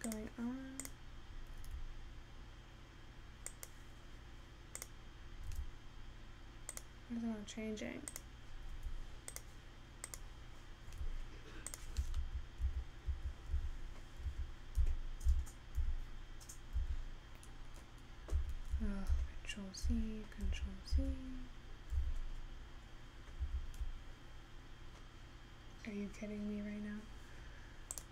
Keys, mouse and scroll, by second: 0.1 click.